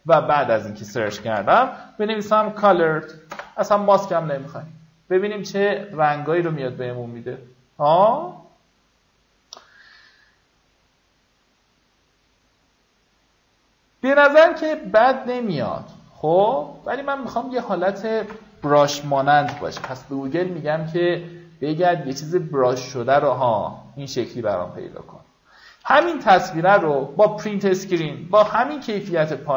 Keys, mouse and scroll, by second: 0.0-0.1 typing, 1.4-3.7 typing, 3.9 Return, 5.4 click, 13.9 scroll down 1, 16.9-18.4 scroll up 1, 18.4 click, 19.2-20.6 typing, 23.8 click.